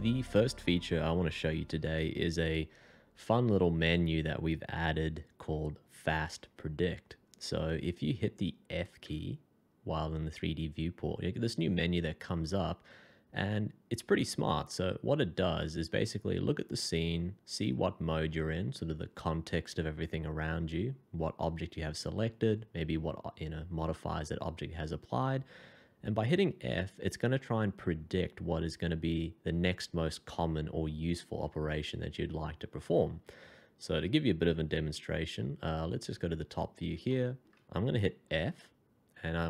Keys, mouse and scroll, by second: 9.0 f, 26.4 f, 34.7 Escape, 36.7 scroll up 1, 37.1 shift+middle click, 38.9 f.